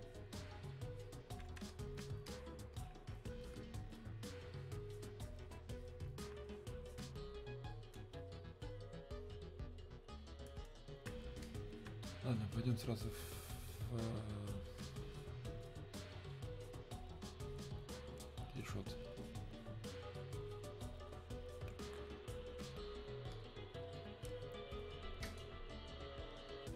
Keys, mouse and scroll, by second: 4.6-8.7 alt+drag, 17.5 click, 21.2-23.4 drag.